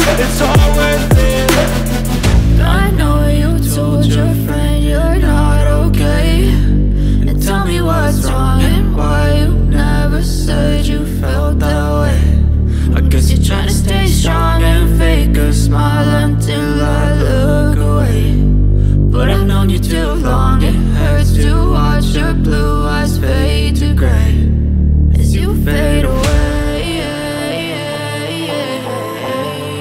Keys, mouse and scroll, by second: 5.5-11.4 drag, 11.4 alt+scroll down 1, 13.8-16.2 drag, 16.2 alt+scroll down 1, 18.2-18.7 alt+scroll up 1, 18.7-25.2 drag, 25.5 click.